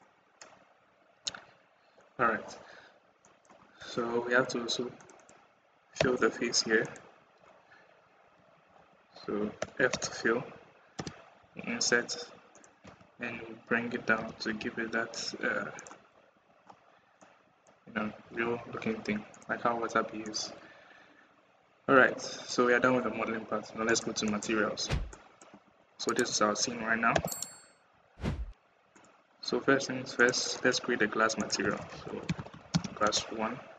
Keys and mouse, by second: 1.0 Tab, 1.7 click, 3.0 middle click, 3.6 Tab, 4.8 click, 5.0 click, 5.9 f, 5.9 r, 8.7 ctrl+z, 9.4 d, 9.9 f, 10.9 i, 12.6 KP_1, 14.0 g, 16.2 Tab, 17.0 middle click, 20.3-22.3 middle drag, 23.7 click, 25.0 middle click, 25.4 KP_1, 27.0 /, 27.7 KP_1, 30.0 click, 31.2-33.0 middle drag, 32.5 s.